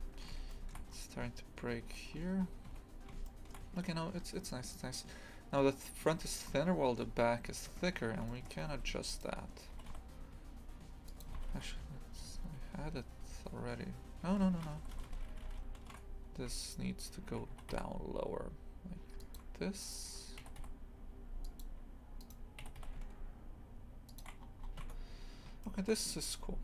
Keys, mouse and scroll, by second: 0.5 shift+middle click, 1.8-2.5 scroll down 10, 2.7 Tab, 3.3 shift+middle click, 4.2 scroll up 1, 6.3 shift+middle click, 6.7-7.0 scroll up 2, 7.7 Tab, 8.3 shift+middle click, 9.1 right click, 9.8 g, 11.4 ctrl+z, 11.5 ctrl+z, 11.8 ctrl+z, 12.2 ctrl+z, 12.6 ctrl+z, 13.0 ctrl+z, 13.3 ctrl+z, 14.7-15.3 ctrl+shift+z, 16.6 shift+right click, 19.8 right click, 22.2 right click, 22.7 g, 24.4 scroll down 1, 24.8 Tab, 25.6-26.6 shift+middle drag.